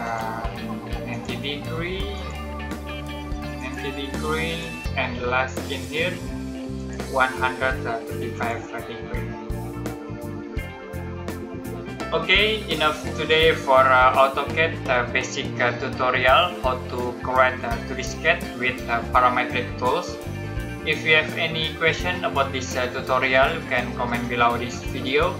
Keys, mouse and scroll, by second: 1.6 space, 2.1 click, 5.0 space, 5.6 click, 10.2 middle click.